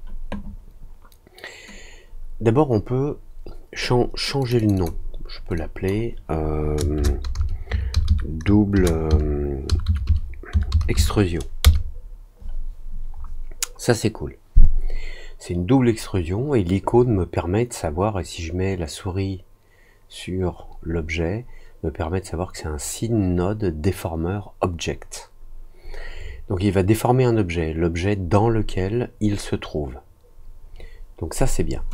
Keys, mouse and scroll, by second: 4.3 click, 4.5 click, 4.7 click, 5.5 click.